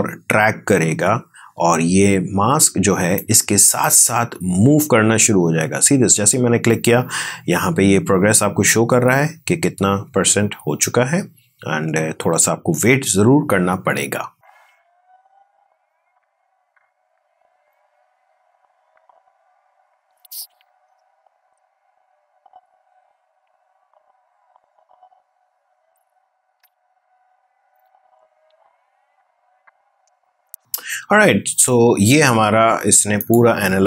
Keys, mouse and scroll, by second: 4.7-6.0 drag, 33.0-33.8 drag.